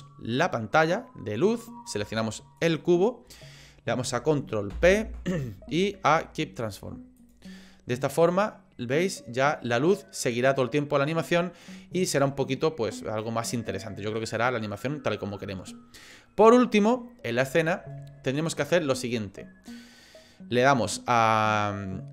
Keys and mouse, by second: 2.6 shift+click, 4.7 ctrl+p, 8.3-11.7 drag, 12.2-13.2 drag.